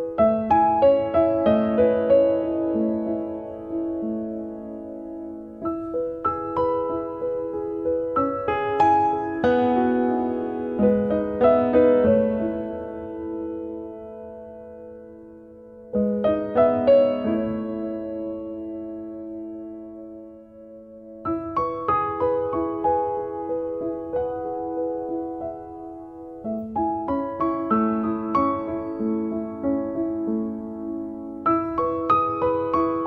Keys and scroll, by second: 15.6 b.